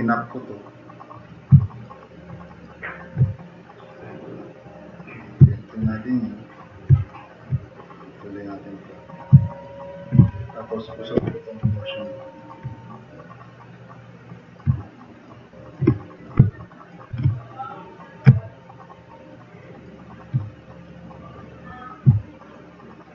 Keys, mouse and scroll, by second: 1.2 click, 1.4-1.9 drag, 2.0 drag, 2.3 drag, 2.7 drag, 6.5 click, 7.1 drag, 8.0 click, 9.4 click, 9.7 drag, 10.2 e, 11.2 e, 11.4 click, 11.7 click, 13.1-14.5 drag, 14.9 drag, 16.4 drag, 16.7 click, 18.0 click, 18.3 drag, 19.5 drag, 20.8-22.1 drag, 22.2 drag.